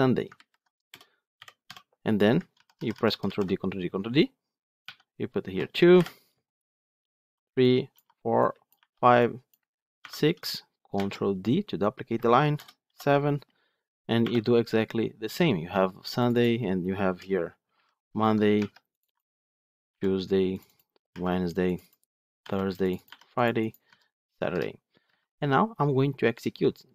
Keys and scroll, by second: 2.4 ctrl+d, 5.8 Delete, 10.9 ctrl+d, 24.9 Escape, 25.9 Escape.